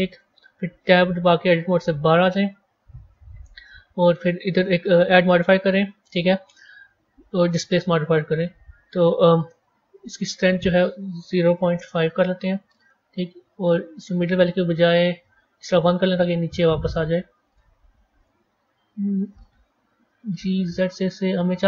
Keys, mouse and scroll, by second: 0.0-2.0 drag, 2.0 Tab, 4.4 click, 5.3-8.4 drag, 10.3-12.8 drag, 12.8-14.0 scroll down 5, 14.0-16.1 drag, 16.1-16.8 scroll up 5, 16.8-19.9 middle drag, 19.9 g.